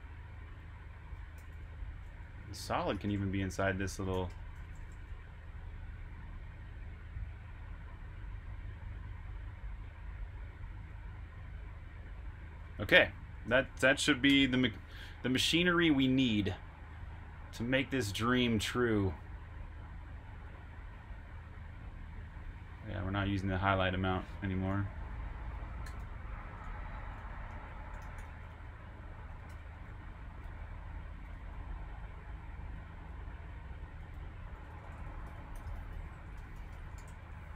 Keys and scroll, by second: 1.1-2.4 typing, 6.1 typing, 10.4-10.7 typing, 12.1-12.4 typing, 14.0-15.3 typing, 25.7-29.4 typing, 32.5-34.4 typing.